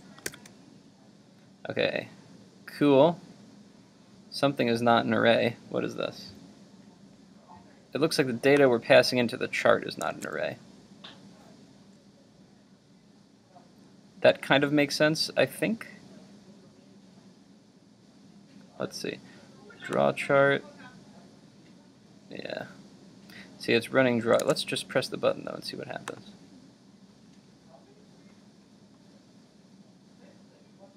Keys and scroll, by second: 0.3 super+r, 10.1 super+Tab, 24.4 super+Tab.